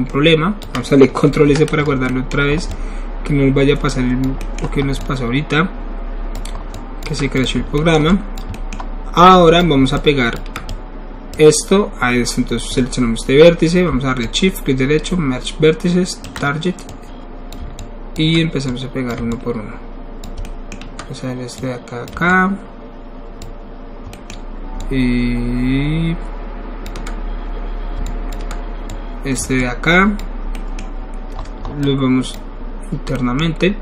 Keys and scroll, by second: 1.4 ctrl+alt+s, 7.5 ctrl+alt+s.